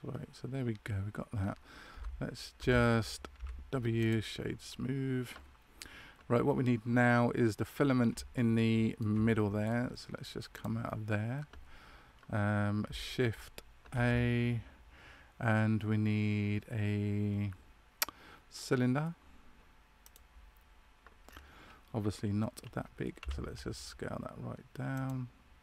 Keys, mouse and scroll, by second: 3.3 w, 8.3 shift+middle click, 10.6 click, 13.9 shift+a, 21.2-23.1 scroll down 1, 23.1-23.7 scroll down 4, 23.1 s.